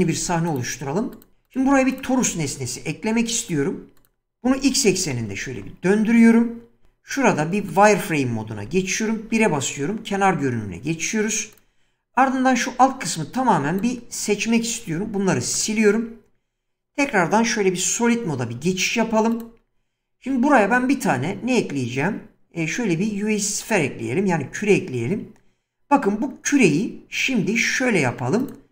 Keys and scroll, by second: 0.2 ctrl+n, 1.6 x, 2.4 shift+a, 4.4-5.2 typing, 5.5 Return, 6.9 z, 8.6 1, 10.1 Tab, 14.9 x, 16.9 Tab, 18.6 z, 20.6 shift+a, 24.5 s.